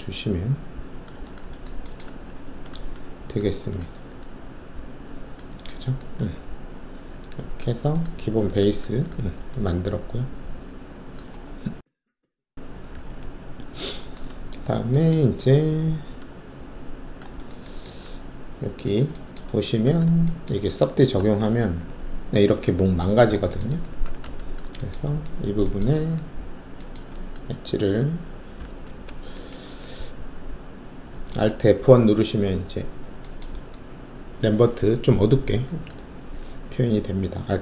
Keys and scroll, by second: 2.0 alt+`, 21.1 alt+`, 21.7 3, 24.0 alt+1, 27.5 alt+2, 28.9 alt+F1.